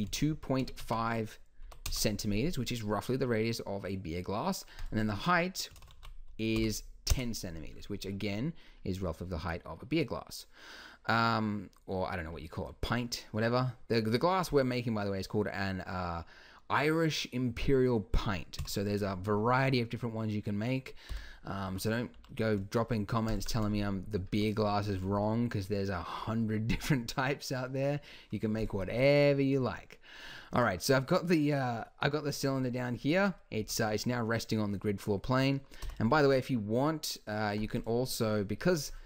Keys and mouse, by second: 2.7-4.8 middle drag, 4.8-9.1 drag, 9.1-10.6 middle drag, 18.6 KP_1, 21.1 t, 21.6 Tab, 22.2 g, 28.6-31.7 drag, 33.6 Tab, 35.8 n, 37.8-39.0 drag.